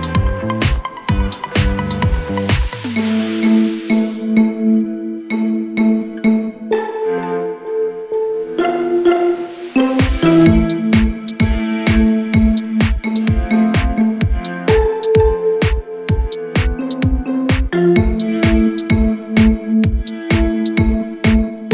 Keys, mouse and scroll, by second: 1.0 middle click, 3.1 click, 4.2 click, 7.9 click, 8.0-11.3 typing, 9.9 click, 12.3 click, 15.9 click, 16.8 click, 18.3 click, 19.1 click, 20.4 click.